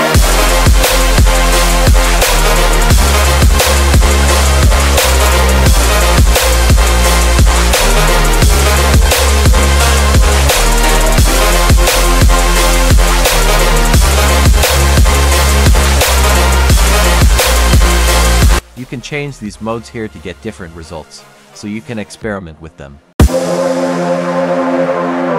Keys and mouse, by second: 3.8 middle click, 4.8 click, 5.4 click, 6.2 click, 7.3-8.5 drag, 9.9-11.3 drag, 12.4-13.7 drag, 14.1-15.1 drag, 17.0 click, 18.8 click, 19.4-20.0 drag, 20.8 click.